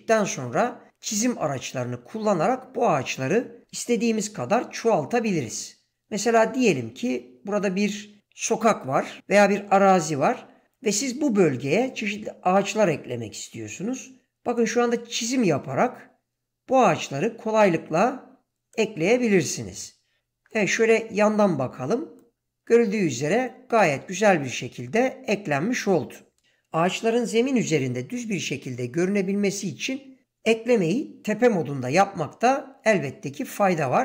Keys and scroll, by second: 4.1 7, 30.8 7.